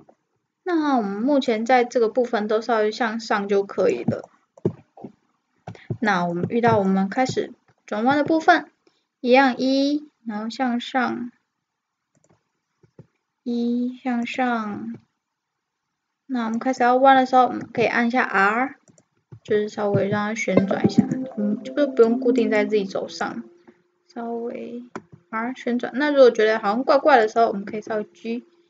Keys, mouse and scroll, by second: 1.6-3.2 drag, 8.1 e, 12.9 e, 14.8 e, 17.6 r, 19.3 e, 22.1-25.0 drag, 25.0 r, 27.7 g.